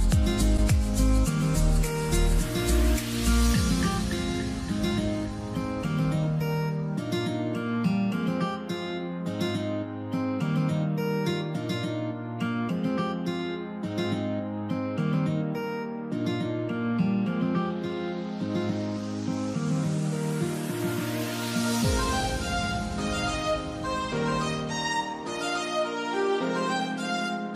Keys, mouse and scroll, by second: 12.7 0, 12.9 Return, 21.5 ctrl+z, 21.8 0, 22.1 Return.